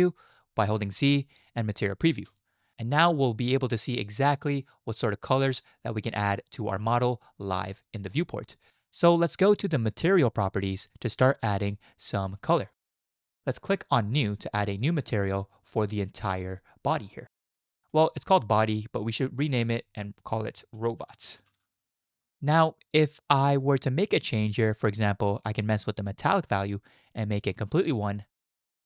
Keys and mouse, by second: 1.0 z, 3.7-4.7 drag, 6.1-7.1 middle drag, 10.5 click, 14.1 click, 15.4-16.6 middle drag, 17.6 middle drag, 19.3 click, 19.5-22.2 middle drag, 22.3-23.6 middle drag, 27.2-28.3 middle drag.